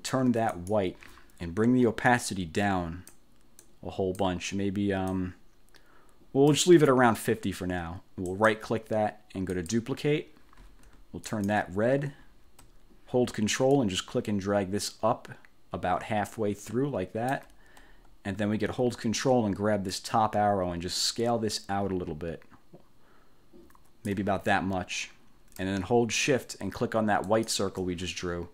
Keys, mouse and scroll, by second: 0.6 click, 2.2-3.4 drag, 3.7 click, 5.2-6.8 drag, 8.4 right click, 9.6 click, 11.4 click, 13.8-17.6 ctrl+drag, 20.0-24.4 ctrl+drag, 27.4 shift+click.